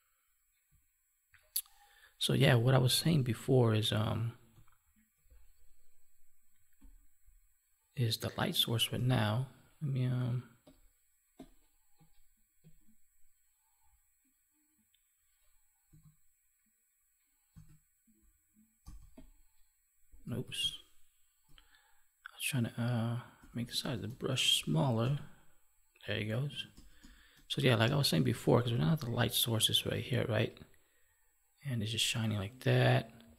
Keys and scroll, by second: 20.4 ctrl+z.